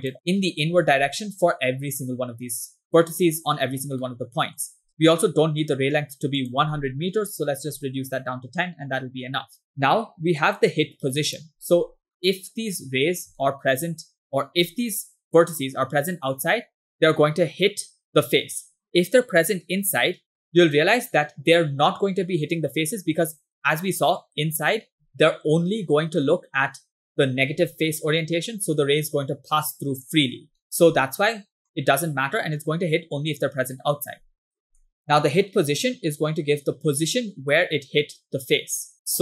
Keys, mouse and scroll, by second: 4.1 middle click, 4.9 scroll up 2, 6.4-8.2 drag, 9.6 scroll down 2, 9.7 middle click, 9.7 scroll up 3, 10.7 click, 13.4 shift+middle click, 25.1 middle click, 27.1 middle click, 30.6 middle click, 31.6 middle click, 33.8 middle click, 34.9 middle click.